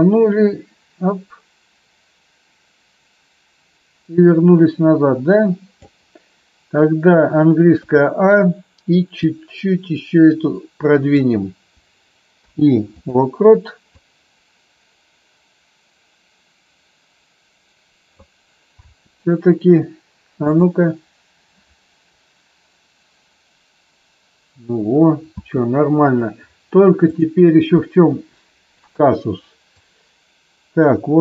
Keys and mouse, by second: 7.7 a, 9.3-11.1 drag, 12.3 i, 14.0-18.3 drag, 18.8 space, 25.3 space, 27.0 click, 29.7-31.2 drag.